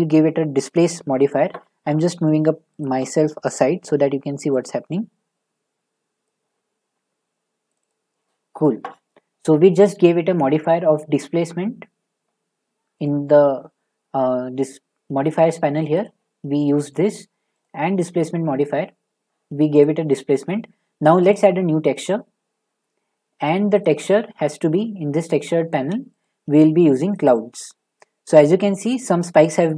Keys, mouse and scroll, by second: 0.7 click, 2.8 click, 6.2 click, 7.7 click, 7.9 click, 13.0 click, 16.0 click, 17.6 click, 19.8 click, 21.3 click.